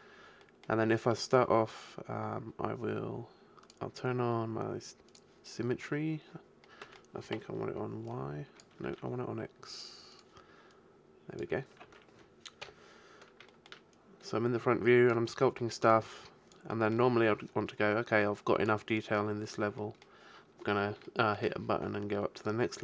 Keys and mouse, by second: 3.6-6.7 drag, 6.7 middle click, 7.3 KP_1, 8.9 ctrl+z, 11.9 ctrl+z, 12.6 KP_5, 17.7 middle click, 18.5-20.8 drag, 20.8-22.8 middle drag.